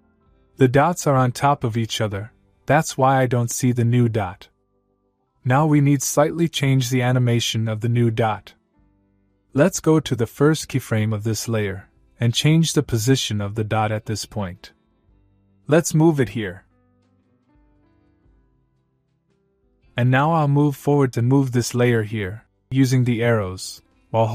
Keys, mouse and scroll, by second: 0.7 scroll up 1, 2.0-2.9 scroll down 1, 10.2-11.7 click, 15.7-17.8 click, 18.7-21.1 click, 21.5-22.5 scroll up 1, 23.9 Right.